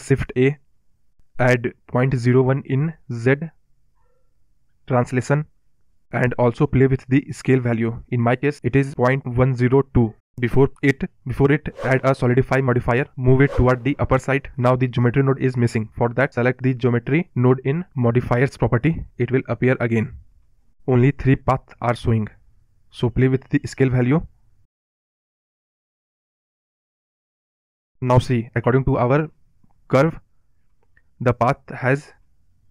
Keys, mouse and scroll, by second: 12.0-14.0 drag, 17.4-18.8 drag, 18.8-19.3 scroll up 10, 19.3 scroll down 1, 19.6-20.0 middle drag, 20.0-20.4 scroll down 4, 20.4 scroll up 1, 20.6-21.0 middle drag, 21.0-21.4 scroll down 3, 21.4-21.9 scroll up 2, 21.9-24.7 middle drag, 29.2 scroll down 1, 29.3-29.7 middle drag, 29.7-30.5 scroll up 8, 30.5 middle drag, 30.7-31.8 scroll down 4, 31.8-32.7 middle drag.